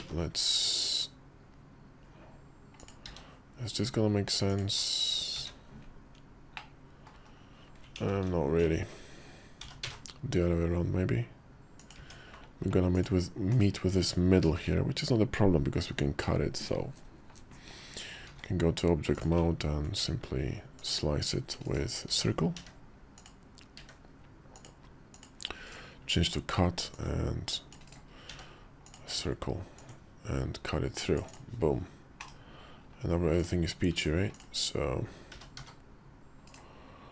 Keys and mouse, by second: 2.8 s, 5.1 `, 6.4 middle click, 7.0 KP_5, 7.7 ctrl+z, 7.9 ctrl+z, 9.4 g, 11.7 Tab, 12.7 click, 13.3 /, 13.7 `, 15.7 KP_5, 18.0 shift+v, 20.6-21.6 ctrl+drag, 21.8 d, 22.3 d, 23.5 d, 26.7 ctrl+click, 28.1 d, 29.6-31.2 drag, 32.0 /, 33.1 click, 33.7 Tab, 35.1 g.